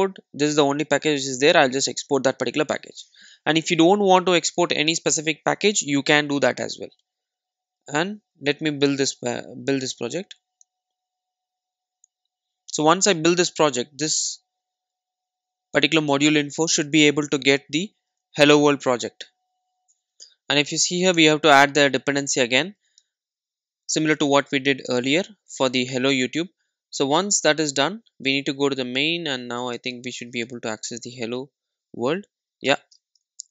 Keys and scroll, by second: 1.9 super+e, 21.2 alt+Return, 32.8 Return.